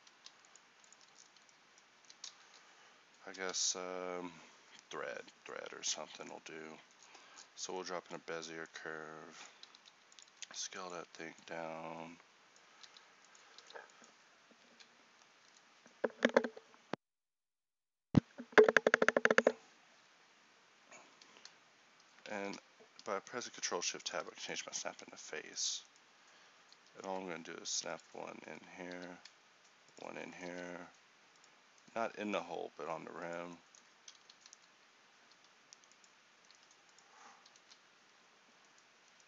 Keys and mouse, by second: 1.0 Tab, 2.0 a, 9.8 s, 10.4 s, 22.4 ctrl+s, 24.9 Tab, 26.8 g, 28.9 g, 35.4 g.